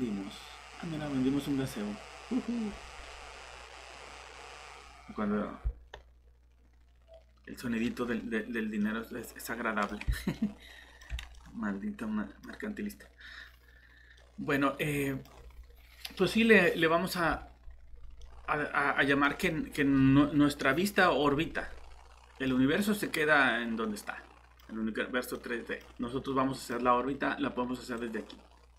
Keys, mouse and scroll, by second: 2.2-2.7 scroll up 1, 2.7-5.1 scroll down 1, 5.8 alt+shift+Tab, 8.8 middle click, 14.8 typing, 28.0 click.